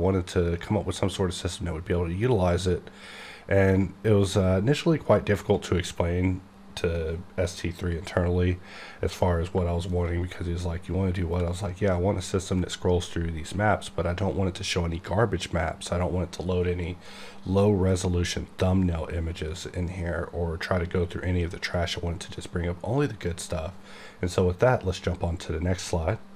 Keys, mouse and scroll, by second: 9.4 right click.